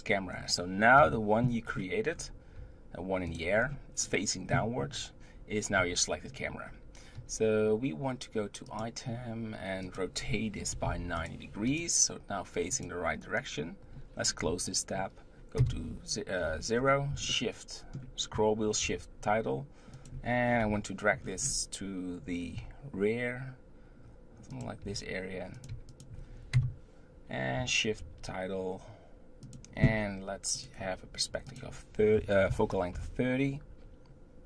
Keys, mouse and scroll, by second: 1.0 KP_3, 1.6-2.1 scroll down 1, 2.1-2.5 scroll up 3, 2.5 g, 3.5-4.2 scroll up 3, 5.8 n, 6.6 n, 8.6 click, 9.8-11.3 drag, 11.7 click, 12.7 click, 14.4 n, 15.6 KP_0, 16.4-17.3 scroll down 8, 17.3-18.8 shift+middle drag, 20.6 KP_7, 21.2-22.5 scroll down 6, 22.5 g, 24.8 r, 25.7 g, 26.5 KP_0, 30.5 click, 31.5-34.4 drag.